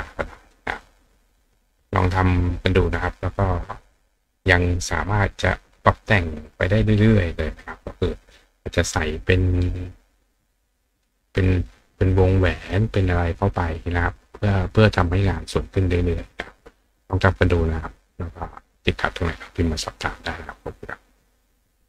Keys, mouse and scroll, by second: 0.7 click, 1.4 click, 2.0 click.